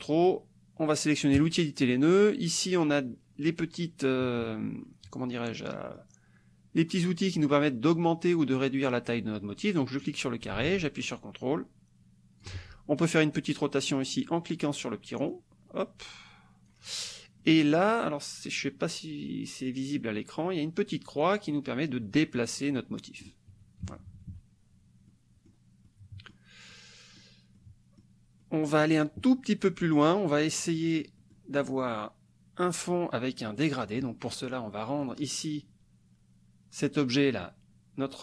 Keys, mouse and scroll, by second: 1.3 click, 3.1 click, 5.8 click, 10.0-12.6 drag, 15.3-16.8 drag, 17.5-19.7 drag, 21.0-23.4 drag, 23.8 KP_Subtract, 25.0 click, 25.9 click, 26.7 click, 27.5 click, 28.4 click, 30.6 click, 33.5 click, 35.1 click, 37.3 click.